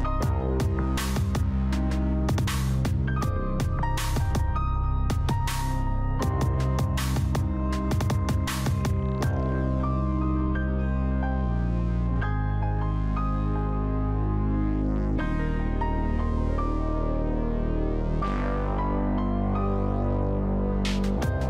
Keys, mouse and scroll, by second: 0.0-1.2 typing, 1.9 click, 3.6-4.3 typing, 4.8 Return, 5.6 click, 5.9 right click, 6.7 click, 11.5-12.3 scroll up 1, 12.3-12.8 scroll down 1, 12.8 click, 14.1 s, 15.1 click.